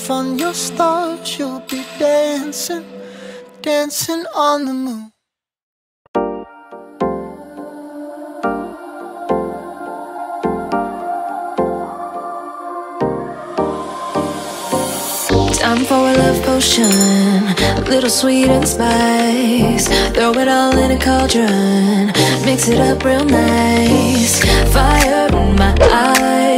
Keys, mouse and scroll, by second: 1.8 alt+click, 2.6 r, 2.6 r, 3.7-5.6 drag, 7.3-8.3 drag, 8.7 click, 9.6-10.7 drag, 11.3-13.5 drag, 13.5 scroll up 9, 14.9 click, 15.6 scroll down 5, 15.9 click, 16.5-16.8 scroll up 5, 17.5-18.1 drag, 19.7 click, 24.4-25.1 drag.